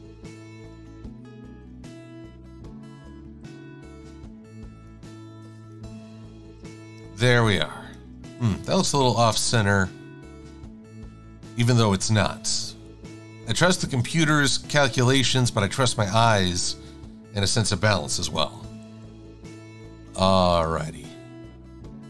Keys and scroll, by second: 1.7 shift+super+[, 2.4 v, 6.7 shift+super+a, 10.2 Left, 10.6 Left, 12.0 Right, 12.9 Left, 14.2 shift+super+a, 16.4 v, 18.4 super+g, 18.9 super+x.